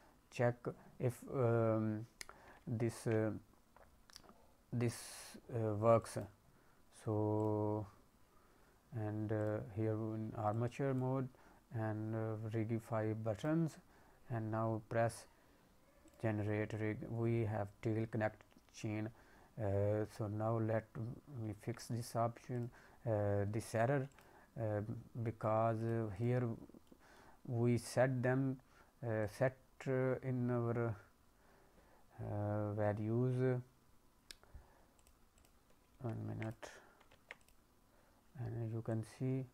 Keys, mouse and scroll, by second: 2.6 ctrl+Tab, 3.7-4.2 scroll down 2, 5.0 click, 6.0 click, 7.3 click, 9.4 click, 10.5 click, 13.3 click, 13.8-16.0 scroll down 3, 16.0 click, 21.4 ctrl+Tab, 22.5 click, 24.0 click, 24.6-25.2 scroll up 1, 25.2 middle click, 25.2-25.7 scroll up 2, 25.7 click, 26.1 click, 26.5 scroll up 2, 26.8 middle click, 29.1 click, 29.7-30.2 scroll down 3, 30.2-30.8 scroll up 1, 30.8-32.2 scroll down 2, 34.9 click, 35.3 click, 36.0 ctrl+Tab, 36.4 click, 37.1 ctrl+Tab, 37.3 click, 38.8 click.